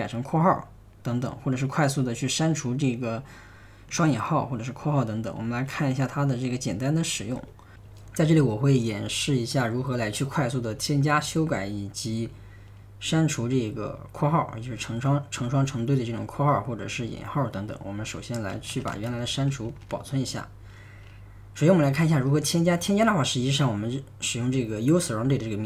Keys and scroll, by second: 5.5 super+Tab, 6.9-7.9 typing, 18.3-20.7 typing, 23.4 typing.